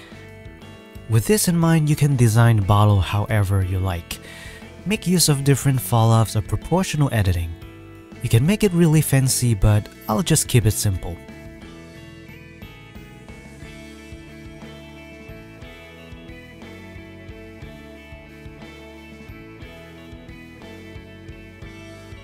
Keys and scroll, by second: 0.9 KP_1, 1.0 Tab, 1.3 e, 2.4 KP_1, 2.6 e, 3.3 ctrl+r, 4.0 o, 4.9 s, 9.6 e, 9.7 m, 10.8 s, 11.9 alt+a, 12.0 c, 12.4 alt+a, 12.8 c, 15.3 KP_1, 15.5 s, 16.9 Tab, 18.9 Tab, 18.9-20.0 typing, 20.8 ctrl+r.